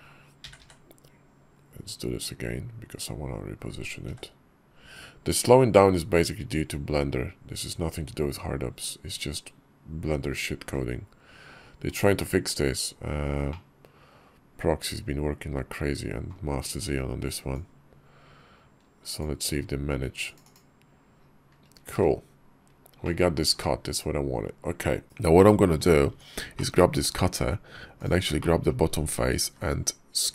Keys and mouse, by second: 14.2-16.7 middle drag, 22.9 middle click, 22.9 drag, 23.7 KP_5, 25.0 /, 25.2 drag, 25.9 Tab, 26.4 click, 28.2 click, 29.3 s.